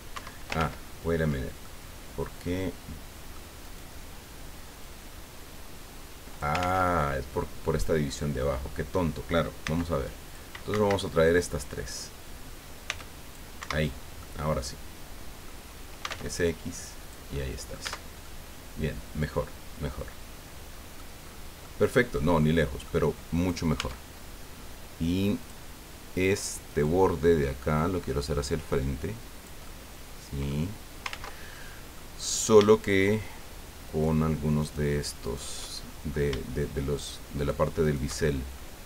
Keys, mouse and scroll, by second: 0.1 Escape, 0.6 ctrl+z, 1.6-3.5 ctrl+drag, 3.6 right click, 4.8-6.6 drag, 6.6 ctrl+z, 7.0 ctrl+click, 8.7 scroll up 2, 9.6 c, 10.0 click, 10.7 Escape, 11.0 click, 12.8 c, 13.0 click, 13.6 Escape, 13.9 scroll down 1, 14.2-15.6 drag, 16.0 s, 16.1 x, 17.0 click, 17.8 click, 17.9 Tab, 18.2-21.2 drag, 21.2 middle click, 21.2 scroll up 2, 21.6 click, 23.3 right click, 23.7 Tab, 25.4 click, 26.7 right click, 27.7-29.6 drag, 29.6-30.7 middle drag, 31.1 ctrl+z, 31.5 ctrl+click, 33.8 shift+right click, 34.6 shift+right click, 35.2 shift+right click, 35.7 shift+middle click, 37.0 shift+right click, 37.4 shift+right click, 37.8 shift+right click, 38.2 shift+scroll down 2, 38.6 right click.